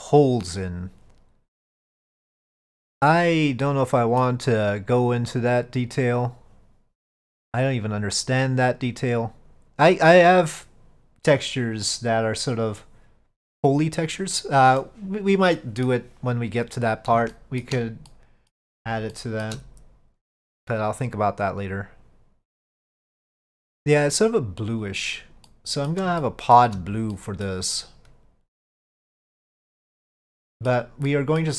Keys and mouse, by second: 3.7 middle click, 11.9-14.9 middle drag, 15.6 middle click, 17.4 shift+middle drag, 18.2-18.6 middle drag, 19.2-19.5 shift+middle drag, 24.9 click, 25.6-26.0 middle drag, 26.3-26.6 shift+middle drag, 27.2-27.5 middle drag, 29.4 click, 30.4-30.8 middle drag, 31.2-31.5 middle drag.